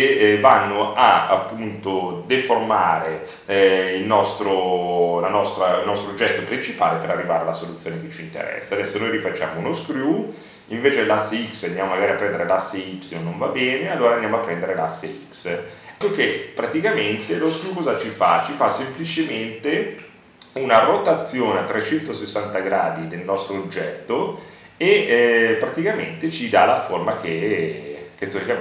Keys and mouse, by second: 1.8-7.6 drag, 11.1 click, 18.0 middle click, 18.9 KP_1, 22.0 KP_1, 22.0 r, 26.3 click.